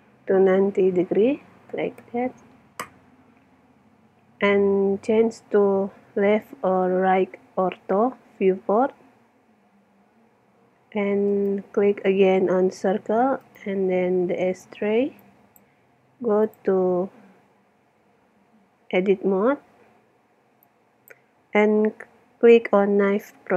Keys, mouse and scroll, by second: 3.9-5.8 middle drag, 6.0 KP_3, 8.2 middle click, 9.1 middle click, 9.7-11.3 middle drag, 11.3 click, 11.6-12.8 middle drag, 12.9 right click, 13.4-15.0 right drag, 15.2-16.5 drag, 17.1 click, 18.4 Tab, 20.6-22.5 drag.